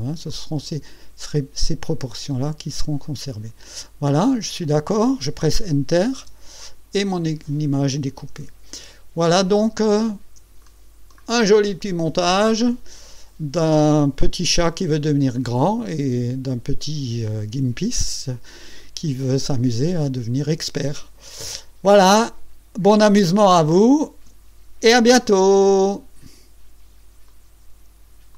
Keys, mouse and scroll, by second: 0.3 click, 1.9-3.6 drag, 6.2 Return, 8.4 Tab, 9.1 ctrl+scroll up 2, 10.0 ctrl+scroll down 2, 10.6 ctrl+click, 21.8 Tab, 24.2 ctrl+scroll up 2.